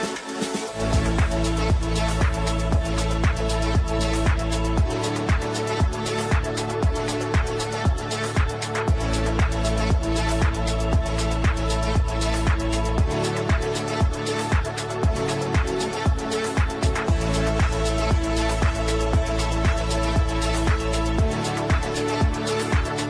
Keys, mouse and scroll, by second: 8.0 right click, 10.1-13.9 typing, 14.0 ctrl+space, 15.0 click, 18.7 shift+Page_Up, 20.1 click, 20.7 shift+click, 20.9 e, 21.2-23.0 shift+drag, 21.9-23.0 ctrl+drag.